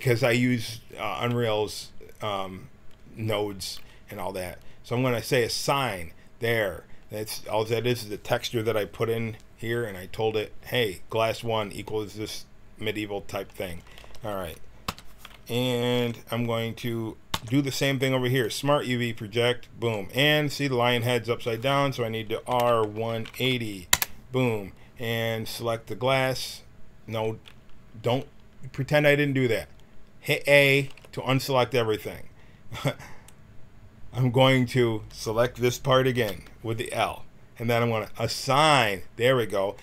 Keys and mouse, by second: 5.5-8.6 drag, 11.8-13.1 middle drag, 14.0 a, 14.8 l, 17.2 u, 22.5 r, 26.0-30.8 drag, 30.8 a, 36.1 l, 38.4-39.8 drag.